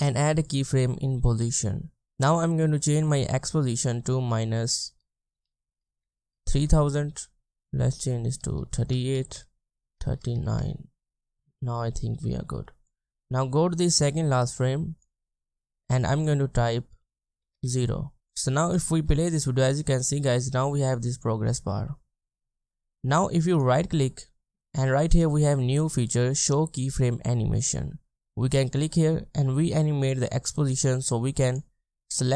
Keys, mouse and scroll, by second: 3.1 double click, 5.3-6.9 typing, 7.6 double click, 8.4-10.9 typing, 16.1 double click, 17.6 Return, 18.9 space, 23.5 right click.